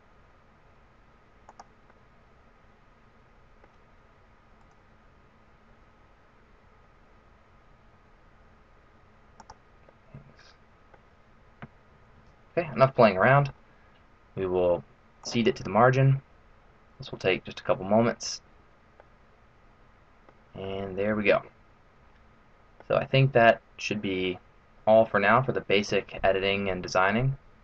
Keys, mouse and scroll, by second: 1.9 middle click, 4.6 right click, 5.1 g, 9.9 middle click, 12.0 alt+b, 13.0 middle click, 15.2 click, 18.9 middle click, 20.7 middle click, 24.0 middle click, 25.2-25.8 scroll down 1, 25.8 middle click, 25.8-26.8 scroll down 2.